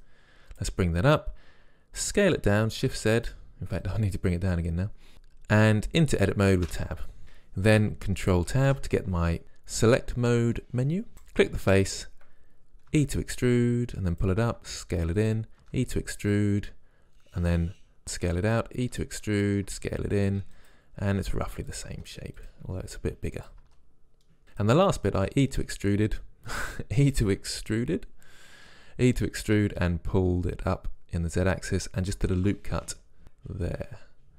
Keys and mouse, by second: 0.0-2.0 drag, 2.1 s, 3.9-6.7 drag, 6.7 Tab, 8.5 ctrl+Tab, 11.6-13.2 drag, 12.9 e, 13.3 click, 14.2 e, 14.6 s, 15.6 e, 18.0 s, 18.9 e, 19.7 s, 21.2 e, 21.9 s, 22.7 e, 23.6 s, 25.3 e, 32.3 ctrl+r.